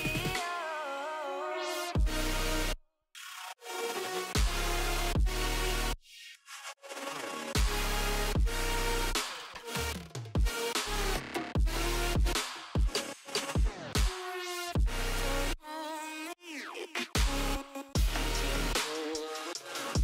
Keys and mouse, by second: 1.7 space, 1.9 click, 2.8 click, 4.3 alt+click, 7.8 click, 9.0-10.2 typing, 10.7 click, 11.4 u, 11.7 u, 12.1 Return, 13.1 click, 14.7 alt+shift+click, 18.6 Return, 19.4 click.